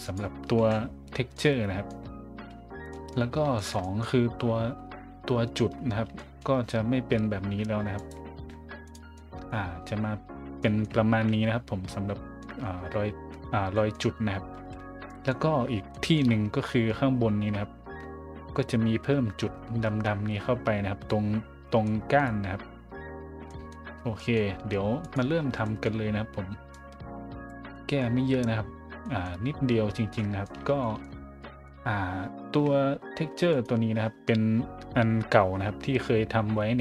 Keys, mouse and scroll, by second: 0.0 right click, 0.6 KP_Decimal, 1.3-1.9 middle drag, 2.1 scroll down 3, 2.9 middle drag, 3.5 shift+middle click, 3.8 middle click, 4.3 middle click, 4.4 middle click, 5.8 scroll down 2, 6.1 shift+middle drag, 8.0 right click, 8.8 right click, 9.1-9.5 middle drag, 10.6 middle drag, 12.0 middle click, 12.4 middle drag, 13.7 middle drag, 14.6 a, 15.1 middle drag, 15.9 shift+middle drag, 16.6 middle drag, 21.8-22.1 middle drag, 23.1 middle click, 23.5 middle drag, 24.1 middle drag, 25.0 right click, 25.4 a, 25.6 middle drag, 26.7 click, 27.7 middle drag, 28.4 middle click, 29.0 middle drag, 29.4 middle click, 30.2 middle drag, 30.8 shift+middle click, 31.4 middle drag, 33.5 right click.